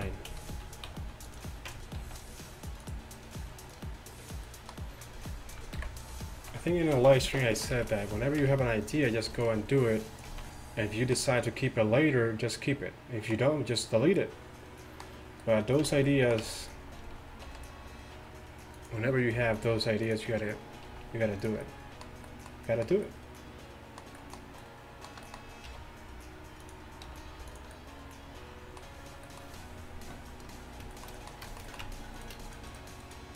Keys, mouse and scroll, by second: 0.0 a, 0.3 a, 0.9 s, 1.7 Tab, 2.1 r, 5.8 KP_1, 6.4 z, 7.0 z, 7.8 z, 8.5 Tab, 10.4 z, 10.7 middle click, 16.5 Tab, 17.5 r, 19.4 g, 21.0 r, 25.7 r, 27.1 g, 28.0-28.6 middle drag, 31.9 Tab.